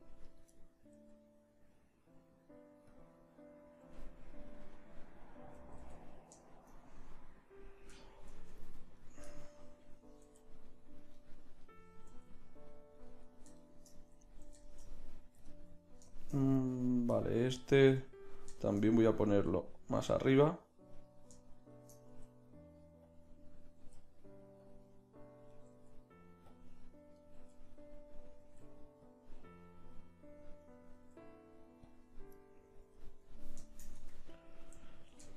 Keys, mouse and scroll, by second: 1.0 g, 5.9 ctrl+z, 9.0 click, 9.5 middle click, 10.4 g, 12.2 click, 12.2 g, 15.6 middle click, 16.8-19.1 right drag, 19.3 g, 22.2 g, 23.8 g, 25.9 g, 27.3 g, 28.6 g, 31.2 g, 32.6 middle click, 33.6 middle click, 34.0 Tab.